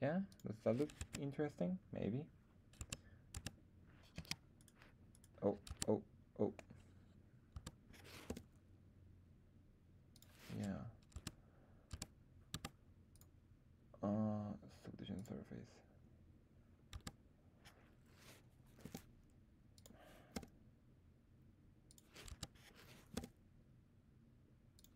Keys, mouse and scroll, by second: 0.2 click, 0.9 Tab, 2.8 Tab, 3.2 Tab, 4.1 z, 4.5 click, 4.5 right click, 5.0 click, 5.0 right click, 5.6 Tab, 7.4 Tab, 8.2 g, 10.0 click, 11.1 Tab, 11.8 Tab, 12.4 Tab, 13.0-15.2 drag, 16.9 Tab, 18.7 r, 19.7 click, 20.2 g, 21.9 click, 22.3 Tab, 23.1 g, 24.7 click.